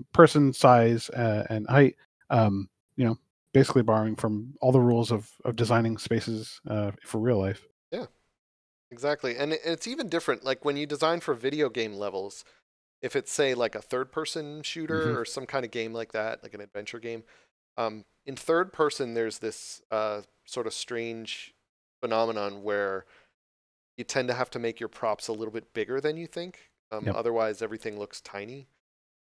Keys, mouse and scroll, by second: 10.9 middle click.